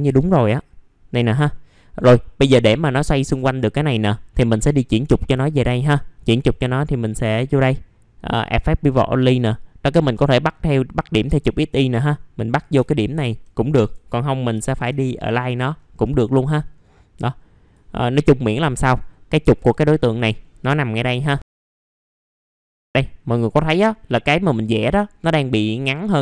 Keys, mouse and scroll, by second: 0.2-0.6 scroll down 1, 1.5 middle click, 5.4 alt+middle click, 7.2 click, 11.2 s, 12.9 alt+middle click, 14.1 middle click, 15.4-15.8 scroll down 1, 16.6 scroll up 1, 17.1 click, 18.1 scroll down 1, 18.9-19.5 scroll up 1, 19.5 click, 20.8 middle click, 20.8 scroll down 1, 21.1 alt+middle click, 21.7 click, 21.8 middle click, 21.9-22.8 scroll down 3, 22.1 middle click, 22.3 middle click, 22.8 scroll up 1, 23.0 middle click.